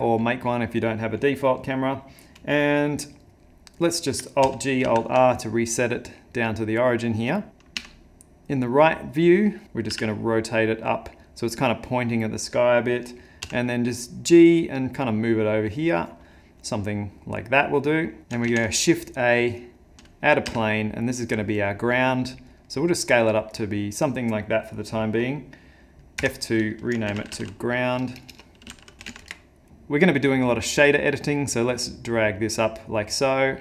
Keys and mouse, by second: 4.4 alt+g, 4.8 alt+r, 5.3 middle click, 6.7 middle click, 7.5 `, 7.8 `, 9.9 r, 13.4 g, 16.3 middle click, 18.1 middle click, 18.5 shift+a, 20.5 s, 22.7 middle click, 26.2 F2, 28.1 BackSpace, 28.3 BackSpace, 31.2 click.